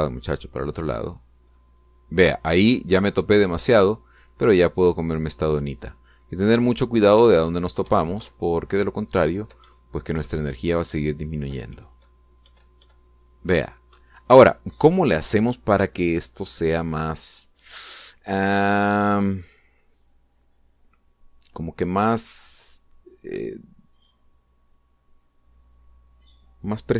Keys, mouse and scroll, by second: 4.6 Up, 8.8 Right, 9.2 Left, 10.6 Up, 11.2 Left, 11.8 Up, 12.7 Left, 13.4 Up, 14.5 Up, 15.2 Escape.